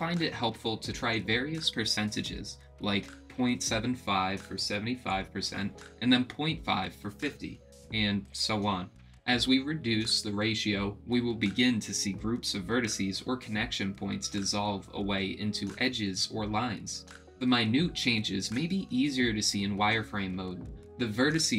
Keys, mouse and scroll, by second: 0.3 middle click, 1.7 click, 3.2-5.8 drag, 6.8-9.5 drag, 11.6-14.8 drag, 15.3-19.9 drag, 20.5-21.5 drag.